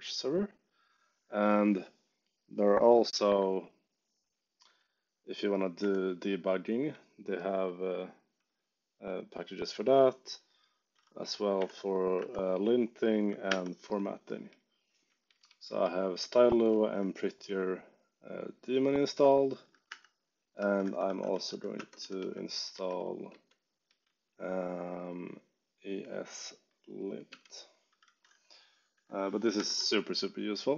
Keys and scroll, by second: 5.7 3, 8.4 j, 9.0 k, 10.9 2, 12.1 4, 13.4 5, 14.4 k, 16.1 j, 16.6 k, 19.8-24.5 typing, 29.5 g.